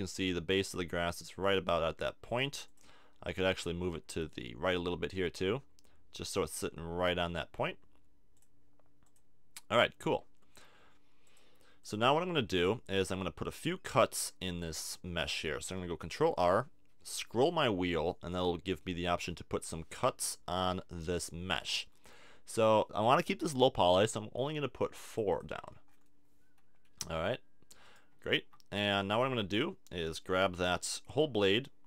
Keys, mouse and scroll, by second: 2.3 click, 2.6-3.9 drag, 3.4 Tab, 4.7-6.0 drag, 8.3 click, 10.1 middle click, 11.2 click, 13.0 Tab, 13.9 Tab, 16.1 ctrl+r, 25.4 middle click, 26.3-27.3 drag, 27.3 middle click, 27.8-29.8 drag, 29.1 a, 29.4 a, 30.8 KP_3.